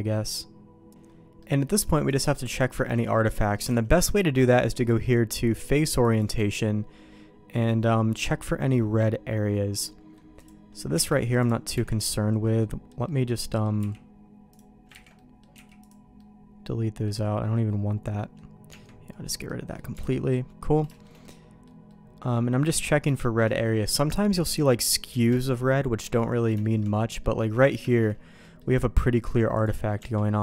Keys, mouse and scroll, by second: 1.3 middle click, 3.8 alt+a, 4.8-6.7 drag, 7.5-10.1 middle drag, 10.3 click, 10.9 Tab, 11.3 click, 11.7 x, 12.5 middle click, 13.0 middle click, 13.7 x, 15.0 ctrl+z, 15.1 middle click, 15.5 x, 16.1 middle click, 17.1-18.3 middle drag, 18.6 Tab, 19.4 middle click, 19.9 alt+a, 20.1 middle click, 20.6 middle click, 20.9 shift+middle click, 21.2 middle click, 21.8 middle click, 22.7 middle click, 23.2 shift+middle click, 23.5 middle click, 25.4 shift+middle click, 26.1 middle click, 26.6 shift+middle click, 27.2 middle click, 27.8 shift+middle click, 28.4 click, 29.6 click, 29.9 Tab.